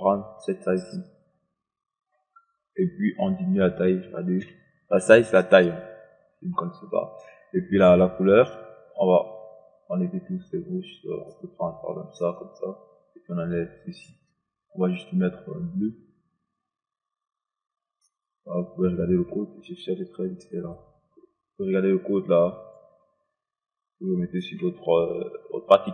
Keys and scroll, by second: 4.4 2.